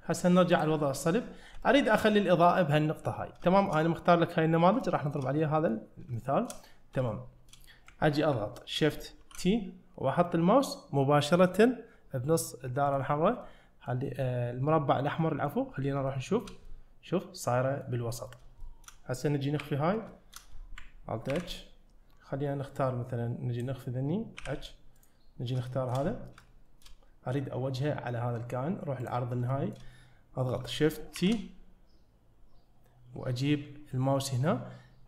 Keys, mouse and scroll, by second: 0.6 click, 1.4 scroll up 1, 1.7 shift+middle drag, 3.2 scroll down 1, 3.5 shift+middle click, 4.8-5.2 shift+middle drag, 5.4 middle click, 6.2 shift+middle click, 6.9 scroll down 1, 7.1 shift+middle click, 7.9 ctrl+middle click, 9.2 shift+t, 13.4-14.0 middle drag, 14.1-15.2 scroll up 2, 15.2 middle drag, 15.7-16.0 scroll up 1, 16.1-16.5 shift+middle drag, 16.7-17.8 middle drag, 18.1-18.5 scroll down 4, 18.6 shift+middle click, 20.1-20.8 shift+middle drag, 21.3 alt+h, 22.8-23.6 drag, 24.4 h, 25.0 click, 25.7 shift+middle drag, 26.0-26.4 scroll up 2, 26.5-26.8 shift+middle drag, 29.1 click, 29.5 shift+middle click, 31.2 shift+t.